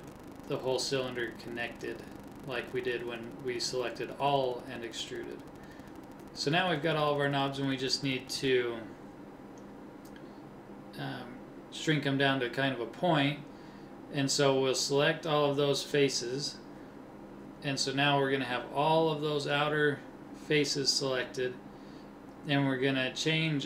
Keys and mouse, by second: 2.6 middle click, 4.6 middle click, 9.2 KP_1, 10.7 middle click, 11.4-12.6 drag.